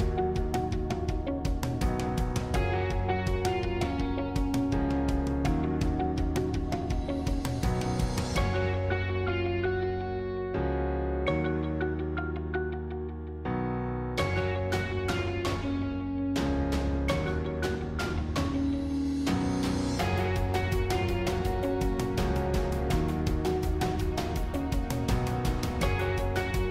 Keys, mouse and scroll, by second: 0.0 click, 0.8-3.6 drag, 3.6 shift+d, 5.8 s, 8.6-11.8 middle drag, 12.0-13.0 scroll up 1, 13.2-15.2 middle drag, 15.2 g, 19.6-22.2 middle drag, 22.2 g, 24.3-26.7 middle drag.